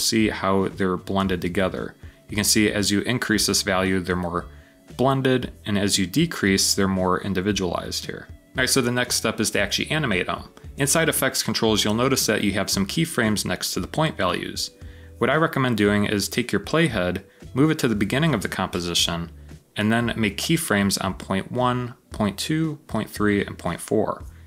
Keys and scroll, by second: 0.1 typing, 12.1 typing.